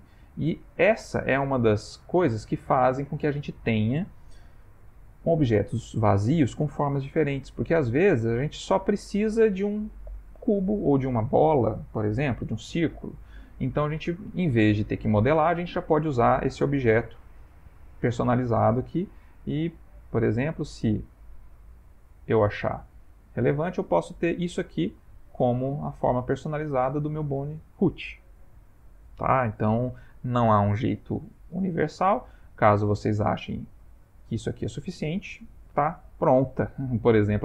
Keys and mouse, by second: 0.8 shift+middle click, 1.7 middle click, 6.8 middle click, 10.0 middle click, 12.6 middle click, 17.5 click, 22.8 middle click, 25.1 click, 25.6 middle click, 32.2 middle click, 34.2 g, 37.3 click.